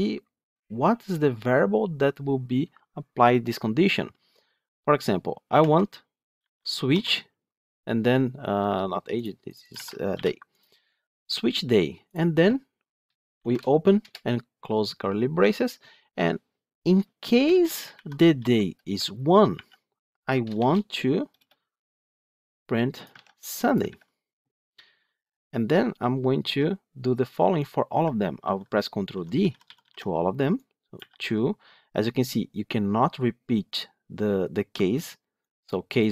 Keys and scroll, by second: 23.0 ctrl+c, 23.7 ctrl+v, 28.3 ctrl+d.